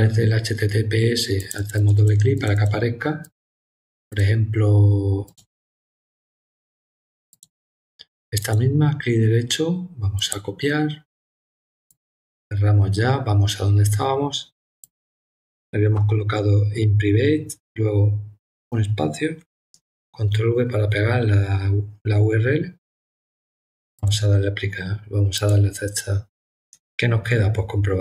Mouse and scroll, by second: 1.4 click, 1.5 click, 1.7 click, 1.9 click, 2.3 click, 2.5 click, 3.2 click, 4.1 click, 5.2 click, 7.3 click, 8.4 right click, 10.1 click, 11.9 click, 14.8 click, 23.9 click, 25.3 click.